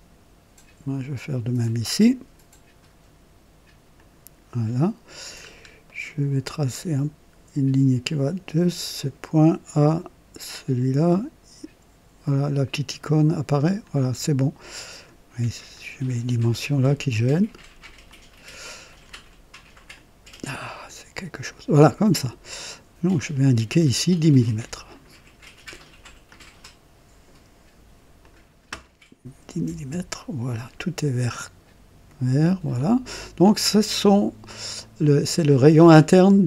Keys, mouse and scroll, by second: 1.6 click, 3.9 click, 5.3-5.6 scroll up 2, 5.8 right click, 8.7 click, 13.5 click, 14.2 right click, 15.6-16.5 drag, 17.2 click, 18.0-18.8 drag, 19.9 click, 20.8-21.7 drag, 23.1 click, 24.4 click, 26.2 click, 28.1 click, 29.4 KP_1, 29.6 KP_0, 29.9 KP_Enter, 30.7-31.2 scroll down 2.